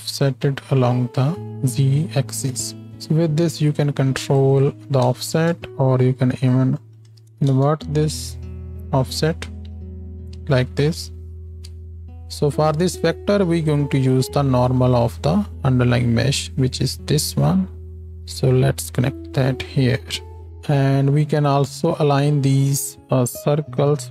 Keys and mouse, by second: 11.8 space, 12.0-16.4 drag, 16.4-20.5 middle drag, 19.0 g, 20.5 ctrl+space, 20.5-22.0 drag, 22.0-24.1 middle drag.